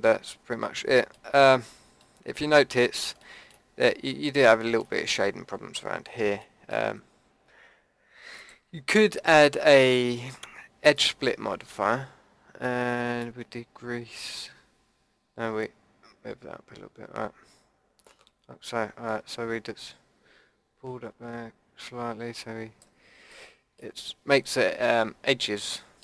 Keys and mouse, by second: 1.3 Tab, 8.4-10.3 drag, 13.2-15.3 drag, 23.5-26.0 drag.